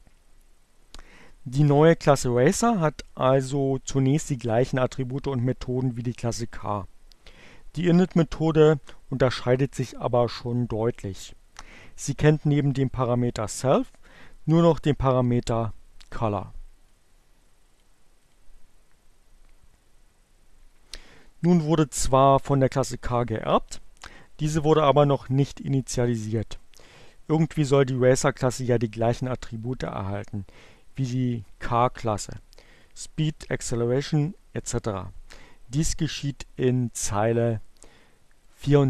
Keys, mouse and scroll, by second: 16.7-18.0 drag, 18.1 click, 38.3-38.8 drag.